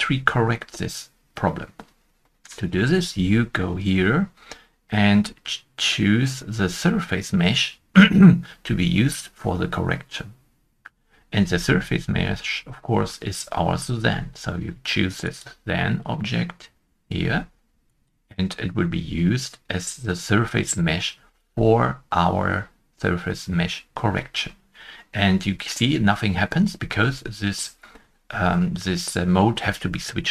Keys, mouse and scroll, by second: 11.3 shift+middle click, 11.4-12.1 scroll down 1, 12.1 middle click, 12.1-15.1 scroll up 1.